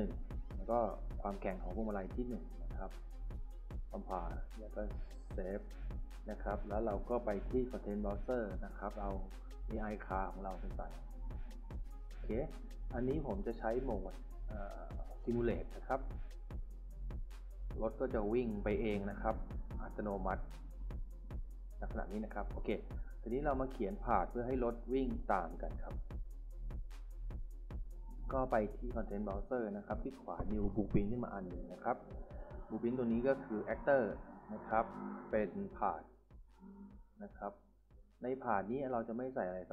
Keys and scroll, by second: 11.1-12.8 typing, 17.5 d, 18.7 s, 19.6 a, 24.2-25.1 typing, 26.1 Escape, 35.6-36.8 typing.